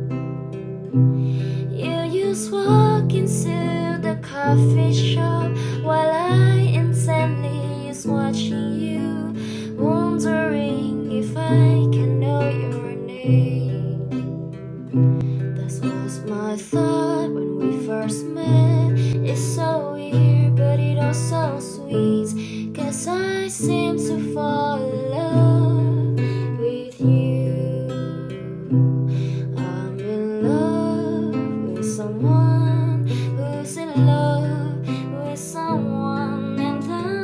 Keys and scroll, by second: 5.8 1, 6.3 8, 6.7 Return, 33.3 ctrl+z.